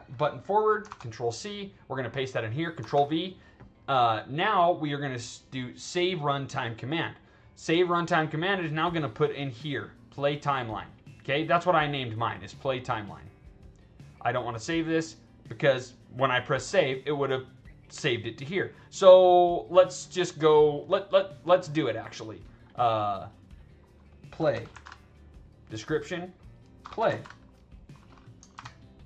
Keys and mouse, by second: 0.8 ctrl+c, 1.4 click, 2.3 click, 2.8 ctrl+v, 12.5 click, 14.3 click, 21.7 click, 22.6 click, 23.5 click, 24.7 a, 26.0 click, 27.0 a, 28.0 click, 28.5 ctrl+v.